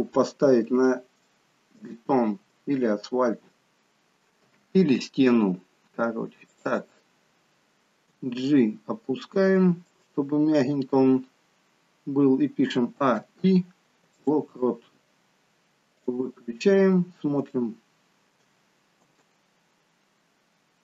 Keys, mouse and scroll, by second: 1.3 shift+middle click, 2.0 shift+middle click, 2.0-2.6 scroll up 2, 2.6 shift+middle click, 2.6-3.6 scroll up 2, 3.6 middle click, 3.6-4.2 scroll down 2, 4.5 KP_3, 6.6 click, 8.1 g, 12.7 a, 13.3 i, 16.1 click, 16.5-17.2 scroll down 3, 17.5 scroll down 2, 17.6 shift+middle click, 19.1 space.